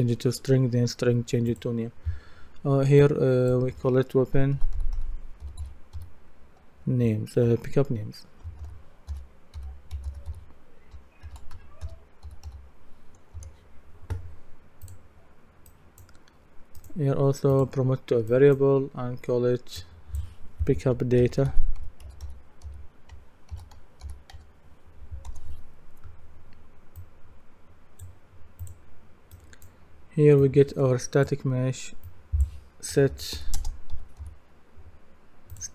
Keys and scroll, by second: 4.3-6.5 typing, 8.6-13.0 typing, 13.4 Return, 21.0-24.8 typing, 25.3 Return, 32.7-33.9 typing.